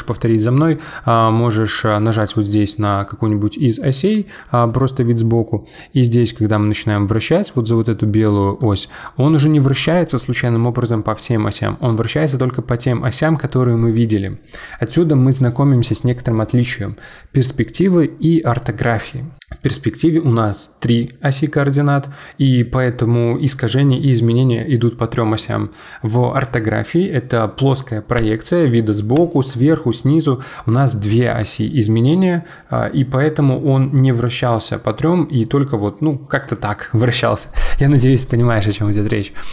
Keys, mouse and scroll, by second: 0.3-2.2 middle drag, 2.2 click, 4.0 click, 4.7 click, 6.1 click, 8.2 click, 8.9-12.1 middle drag, 39.3 scroll up 2.